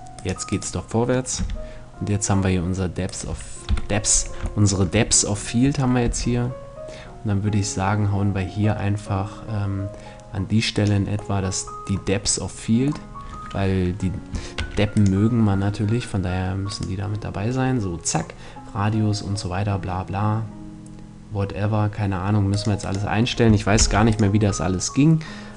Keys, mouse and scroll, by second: 0.9 g, 2.7 right click, 3.2 KP_7, 5.5 g, 10.3-12.1 drag, 10.9 middle click, 14.1 ctrl+s, 16.2-18.1 right drag, 22.0-24.1 drag, 23.3 ctrl+s.